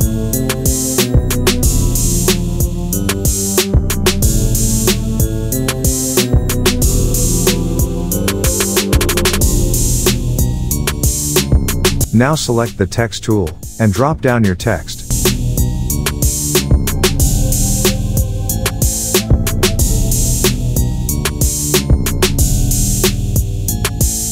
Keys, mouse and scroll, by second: 0.3 click, 0.9-1.9 click, 5.9 alt+scroll up 1, 6.0 space, 6.1 click, 6.9 click, 7.2-8.2 alt+scroll down 2, 8.5-8.9 alt+shift+click, 9.1 alt+scroll down 1, 9.3 click, 10.6 alt+scroll up 1, 11.5 click, 13.2 shift+a, 15.2 Caps_Lock, 15.2-16.7 typing, 18.1 click, 19.7-20.5 typing, 23.3 click.